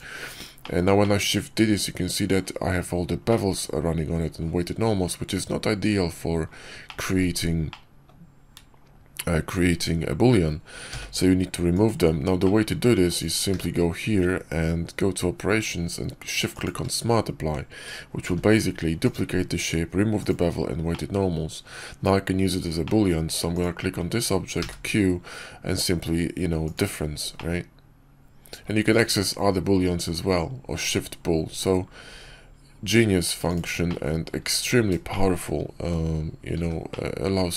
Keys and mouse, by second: 0.5 shift+middle click, 0.9 click, 1.4-2.3 middle drag, 3.2-3.7 drag, 3.7-4.3 middle drag, 6.7-7.1 middle drag, 7.6-8.0 middle drag, 10.8 x, 12.3 click, 13.0 click, 13.4 q, 18.1 g, 19.4 s, 20.8-21.6 drag, 22.7 click, 24.5 q, 27.2-28.5 drag, 28.8 q, 33.8-34.2 drag, 35.0 shift+drag, 36.5 h, 36.8-37.2 drag.